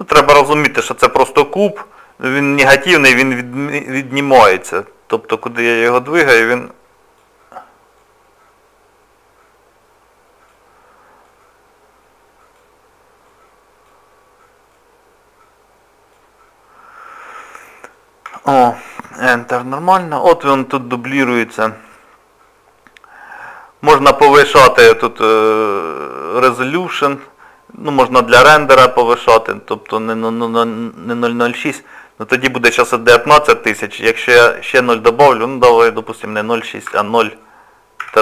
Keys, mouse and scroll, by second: 0.1 middle click, 4.1 click, 6.1 click, 8.0 click, 11.2 click, 13.3 click, 14.7 click, 16.9 scroll down 1, 17.6 middle click, 18.3 Tab, 18.9 click, 20.0-20.6 scroll up 2, 21.6 click, 23.4 click, 29.8 click.